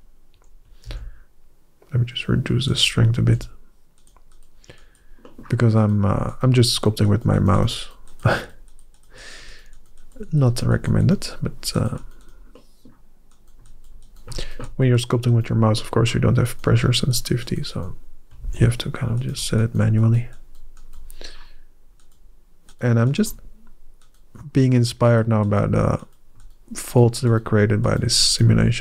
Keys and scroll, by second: 0.7 shift+f, 3.0 f, 18.2 shift+f.